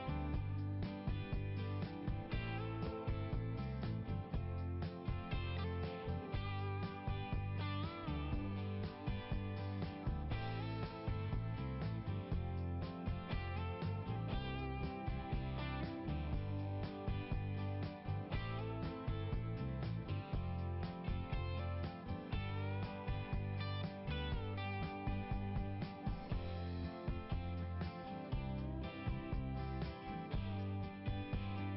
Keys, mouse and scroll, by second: 3.7 click, 4.7 click, 6.5 right click, 9.0 click, 9.2 click, 9.7-10.6 scroll down 1, 12.3 click, 14.6 click, 16.3 click, 17.5 click, 17.8 click, 21.2 scroll down 1, 26.1 right click, 28.1 click, 29.3 click.